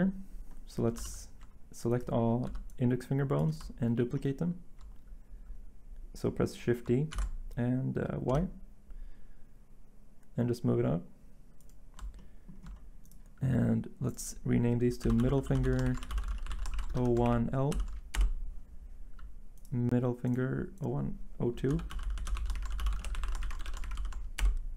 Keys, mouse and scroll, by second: 1.0 z, 2.5 b, 7.1 d, 8.3 y, 15.0-17.7 typing, 18.1 Return, 21.4-23.9 typing, 24.4 Return.